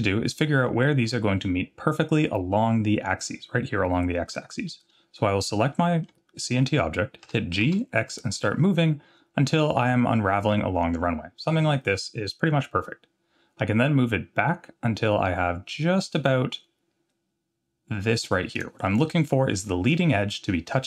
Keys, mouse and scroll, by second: 0.1 middle drag, 4.7-5.2 scroll down 1, 5.8 middle drag, 7.2 g, 19.9 scroll up 2.